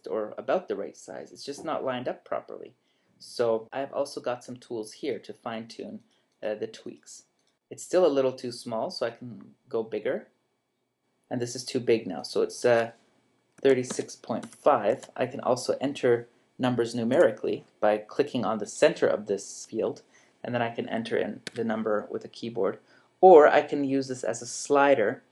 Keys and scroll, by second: 13.6-14.9 typing, 17.1 Return, 21.5 Escape.